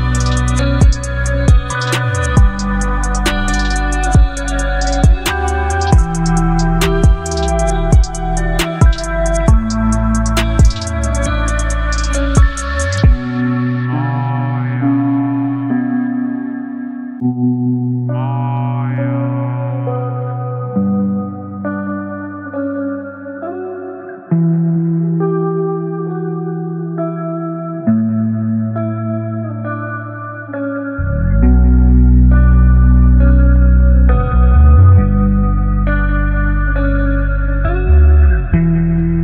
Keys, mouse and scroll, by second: 1.0 Return, 4.1 click, 6.8-12.0 drag, 12.0 e, 14.3 3, 15.7-17.8 typing, 19.1 Return, 22.9 click, 25.1 v, 26.7 click, 38.6 click.